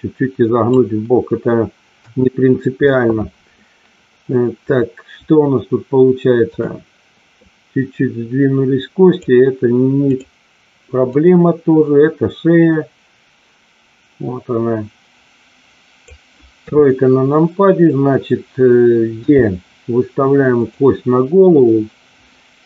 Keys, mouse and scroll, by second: 1.9 KP_1, 6.4 click, 7.4-9.2 drag, 11.2-16.0 drag, 16.7 KP_3, 19.2 e, 20.5 click.